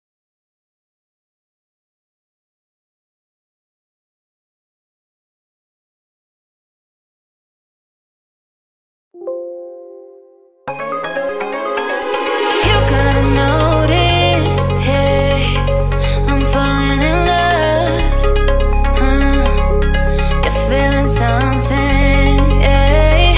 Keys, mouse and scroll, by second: 0.7 typing, 1.0 Return, 2.5 shift+middle click, 2.8 scroll down 1, 3.5 click, 3.9 ctrl+click, 6.2 ctrl+x, 8.1 right click, 9.0 click, 15.2 click, 17.2-18.4 scroll up 1, 18.4 click, 18.9 ctrl+click, 20.7 ctrl+x, 22.6 p, 23.0 click.